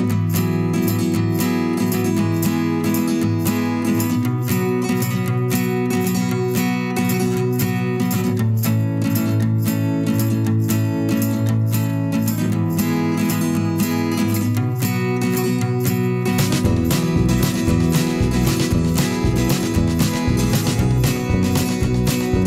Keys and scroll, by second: 1.6 ctrl+t, 2.4 Return, 3.2 ctrl+j.